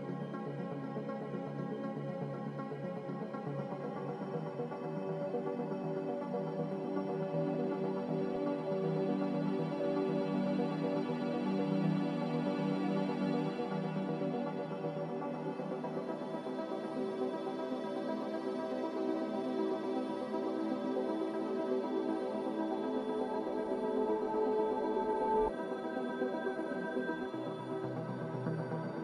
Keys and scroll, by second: 2.2 x, 6.0 z, 7.6 5, 8.0 Return, 9.5 a, 26.5 x.